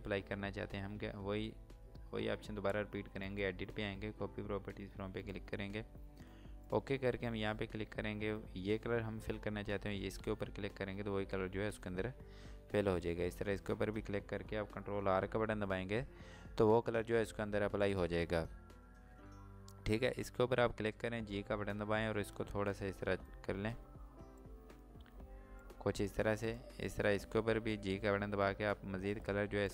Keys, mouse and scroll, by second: 3.1 click, 9.9 click, 13.4 click, 17.9 click, 20.3 click, 21.6 g, 22.6 click.